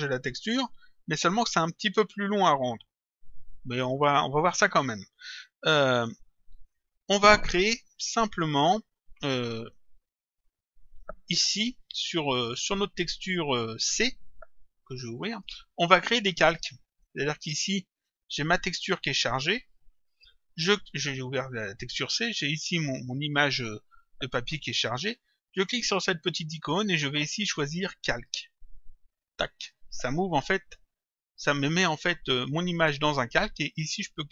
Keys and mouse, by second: 6.0 click, 15.2 click, 17.4 click, 26.4 click, 29.2 click.